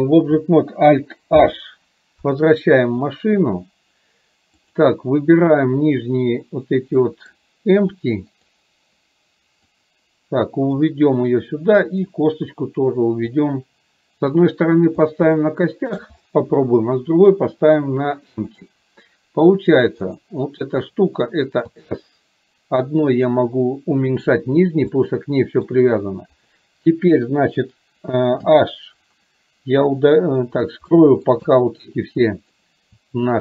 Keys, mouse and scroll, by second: 1.6 alt+h, 4.8 click, 6.0 click, 7.1 middle drag, 8.5 drag, 9.8-10.9 drag, 13.5-15.0 drag, 15.4-16.1 shift+middle drag, 18.5 click, 25.0-25.8 shift+middle drag, 26.5 click, 30.0 click, 31.1 middle click, 31.5 shift+middle click, 32.5 click.